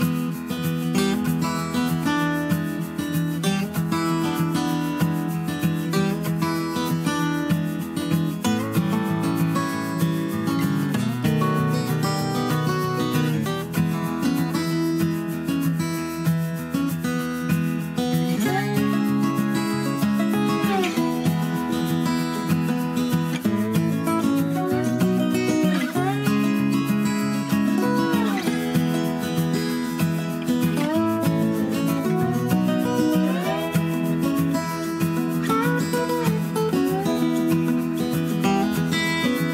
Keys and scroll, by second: 0.8 super+c, 1.0 super+v, 2.6 d, 16.2 d, 26.7 BackSpace, 26.8 BackSpace, 31.8 super+d.